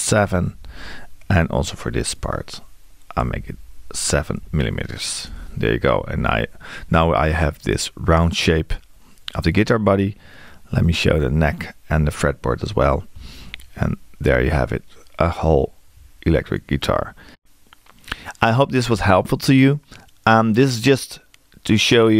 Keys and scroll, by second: 3.2 f.